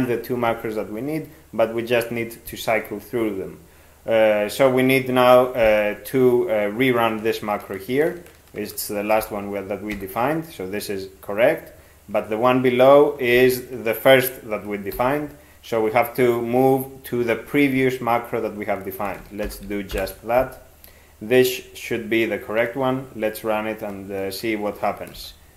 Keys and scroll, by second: 9.2 ctrl+x, 10.0 e, 13.4 ctrl+n, 15.0 ctrl+n, 19.1 ctrl+x, 19.5 ctrl+k, 19.9 ctrl+p, 25.2 ctrl+x.